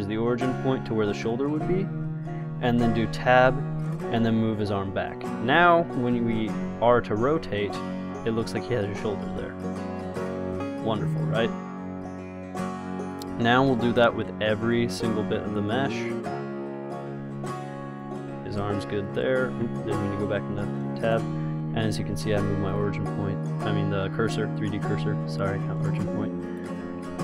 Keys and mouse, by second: 3.3 Tab, 4.1 g, 6.3 g, 7.5 r, 10.9 g, 11.6 r, 13.4-14.5 drag, 13.9 Tab, 14.5 g, 15.5 Tab, 15.9 g, 17.6 r, 18.5 Tab, 19.8 Tab, 21.6 ctrl+z, 22.4 shift+s, 25.1 r, 26.7 click.